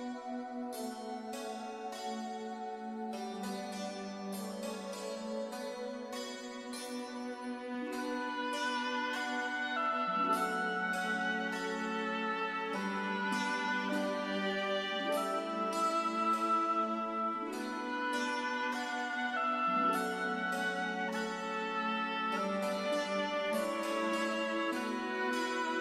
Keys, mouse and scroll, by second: 4.0 click, 21.7 click, 23.8 KP_4, 24.5 KP_Enter, 25.7 click.